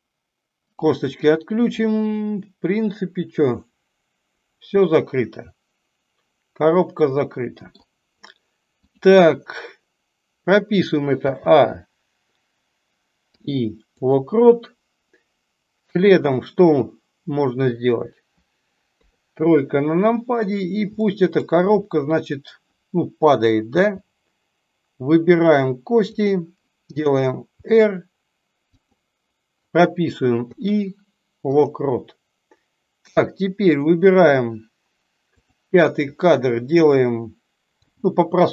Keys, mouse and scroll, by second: 1.1-7.8 middle drag, 20.9-21.4 shift+middle drag, 35.4 click.